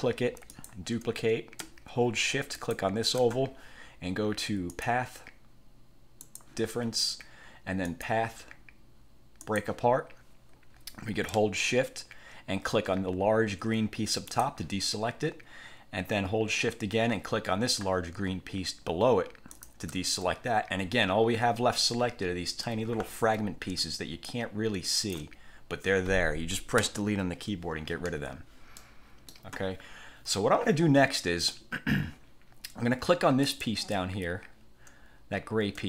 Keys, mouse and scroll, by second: 0.6 click, 2.7 shift+click, 4.9 click, 6.4 click, 8.0 click, 9.6 click, 14.4 shift+click, 19.7 shift+click, 22.1-22.7 ctrl+scroll up 2, 23.1-23.4 ctrl+scroll down 2, 24.4-25.5 ctrl+shift+drag, 26.9 Delete, 28.2 1, 28.9-29.6 drag, 33.6 click.